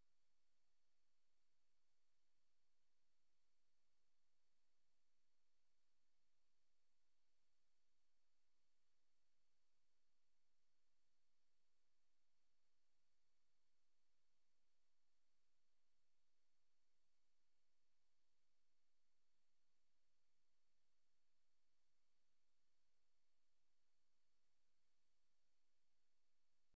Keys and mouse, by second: 3.1 click, 5.1 click, 6.6 click, 8.1 click, 8.6 click, 9.7 click, 9.9 click, 10.2 click, 14.7 click, 17.5 super+d, 20.4 click.